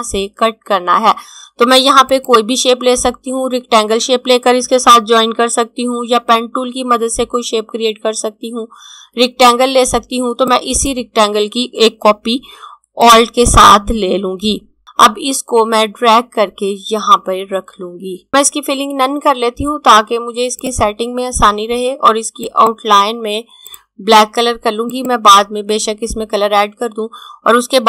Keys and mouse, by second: 1.8 click, 9.9 click, 14.8 click, 20.6 click.